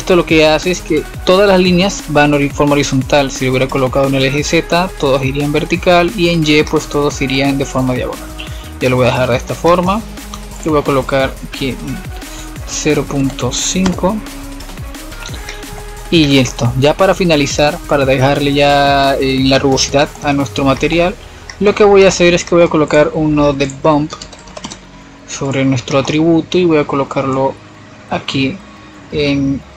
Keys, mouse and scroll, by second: 2.9-3.8 middle drag, 3.8-4.3 scroll up 3, 4.3-8.3 middle drag, 8.3-11.4 drag, 12.7-15.2 drag, 15.2-15.8 scroll down 9, 15.8-16.3 middle drag, 16.3-17.4 scroll up 1, 17.4 click, 18.8-19.1 scroll up 3, 19.1 middle click, 20.0-22.7 drag, 22.7-25.7 middle drag, 25.7-28.3 drag, 28.3-29.4 middle drag, 29.4-29.7 drag.